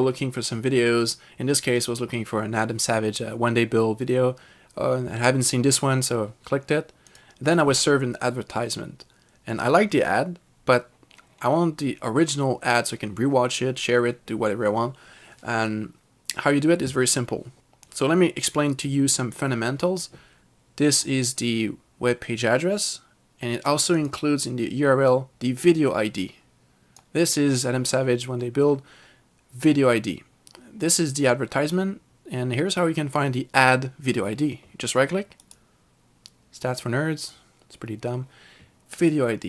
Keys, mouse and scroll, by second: 7.2 click, 21.0 click, 24.1 click, 25.2 click, 35.5 right click, 37.2 r, 37.3 click.